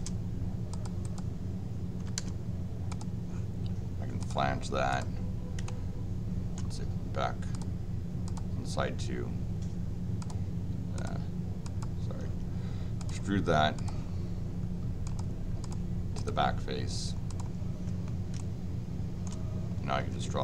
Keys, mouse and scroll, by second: 0.7 click, 1.0 click, 2.9 click, 4.2 click, 4.9 click, 5.6 shift+middle click, 7.5 click, 8.2 click, 10.2 click, 10.9 click, 11.6 click, 13.0 click, 13.7 click, 15.0 click, 15.6 click, 16.1 click, 17.3 click, 18.3 shift+middle click, 20.0 l.